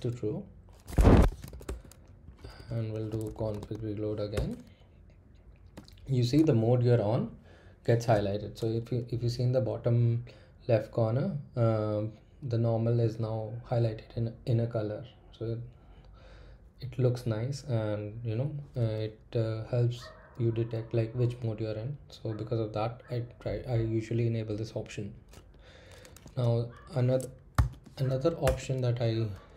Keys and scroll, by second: 0.0-4.3 typing, 0.9 Escape, 4.3 Return, 5.7 typing, 27.5 typing, 28.4 Return.